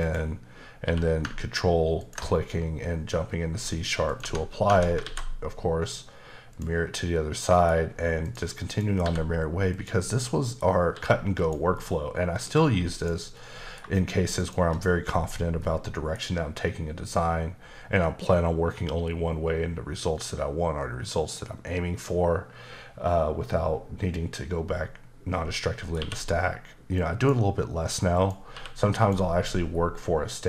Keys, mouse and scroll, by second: 0.0 click, 0.8 q, 2.0 ctrl+click, 4.2 Tab, 4.7 Tab, 5.0 alt+x, 6.5 click, 7.4 middle click, 8.2 click, 8.7 click, 9.0 g, 9.7 click, 10.1 middle click, 10.9 s, 11.4 click, 11.7 middle click, 12.6 g, 12.9 click, 13.3 middle click, 14.4 shift+click, 15.6 middle click, 17.1 middle click, 26.0 q, 26.9 click, 28.1 click, 28.5 q, 29.0 click.